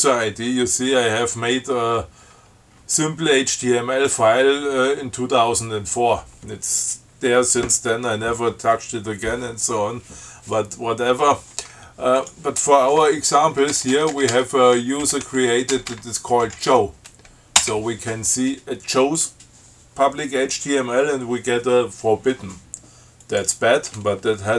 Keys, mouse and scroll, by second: 12.4 click, 13.2 BackSpace, 15.1-17.0 typing, 17.9 Return, 23.5 click.